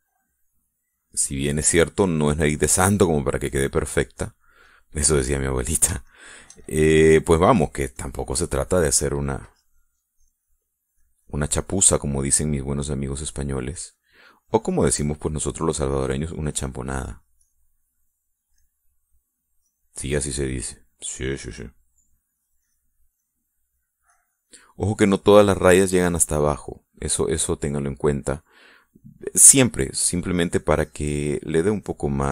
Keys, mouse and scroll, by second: 1.1-4.4 drag, 4.5 middle click, 5.2 middle click, 7.1 shift+middle click, 8.6 click, 9.6 middle click, 10.5-12.6 drag, 12.6 middle click, 13.9 middle click, 14.6-15.7 drag, 15.9 click, 16.2 middle click, 16.8-19.6 drag, 19.6 middle click, 20.6-21.6 drag, 22.1 click, 23.4-25.0 drag, 25.1-26.1 drag, 27.8-29.7 middle drag, 31.6-32.3 drag.